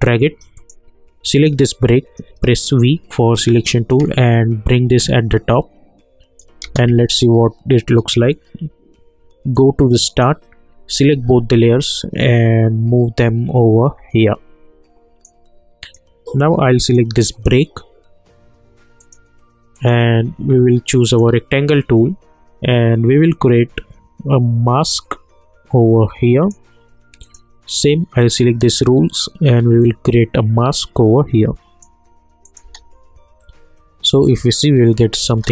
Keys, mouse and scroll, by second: 2.3 v, 4.2-6.4 shift+drag, 6.6 space, 9.5-11.1 drag, 11.1 ctrl+a, 11.9-15.8 drag, 20.9 click, 23.3-32.4 drag, 32.6 space, 35.3 space.